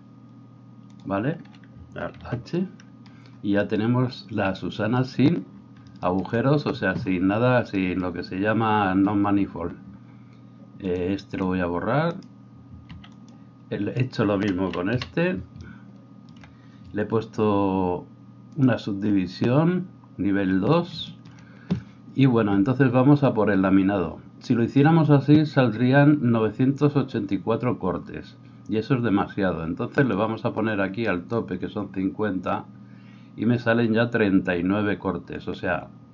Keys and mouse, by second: 1.8-10.9 alt+middle drag, 2.1 alt+h, 10.9-18.7 drag, 12.2 middle click, 12.2 right click, 12.9 x, 14.0 middle click, 14.0 right click, 14.9 KP_1, 18.7-30.2 middle drag, 30.2-36.1 drag.